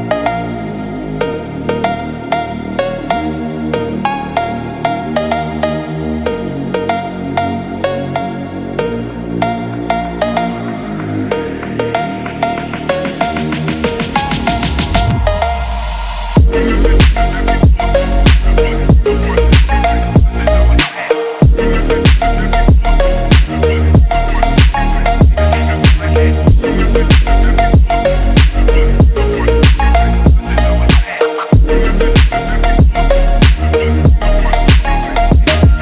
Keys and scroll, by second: 0.7 Right, 2.2 Up, 2.5 Left, 5.9 Left, 6.4 Down, 6.6 Right, 6.8 Up, 6.9 Right, 10.4 Left, 10.7 Up, 11.7 Left, 12.6 Up, 25.3 shift+Up, 25.7 Down, 26.3 Down, 33.0 p, 33.5 p, 34.5 ctrl+z, 35.0 ctrl+z.